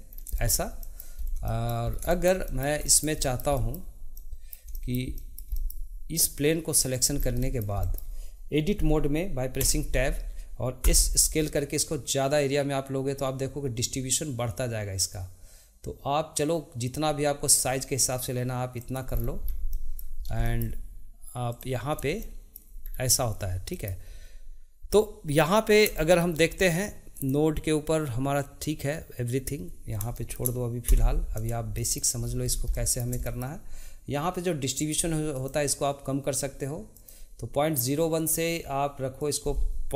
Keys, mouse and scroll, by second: 0.1 scroll down 2, 0.3 shift+middle click, 1.1-1.5 scroll up 2, 1.5 shift+middle click, 1.9 scroll down 1, 2.1-6.1 shift+middle drag, 6.1-6.9 scroll down 1, 6.9 click, 7.1 scroll down 2, 7.4-9.6 middle drag, 9.6 Tab, 10.8 s, 23.8-27.1 shift+middle drag, 27.1-30.2 drag, 30.2 shift+middle click, 31.7 middle click, 34.8 click, 35.4 click.